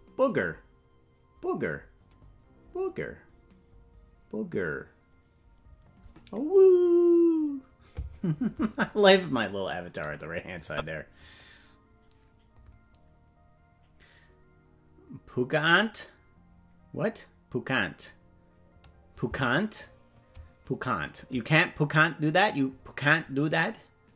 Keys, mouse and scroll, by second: 10.6 click.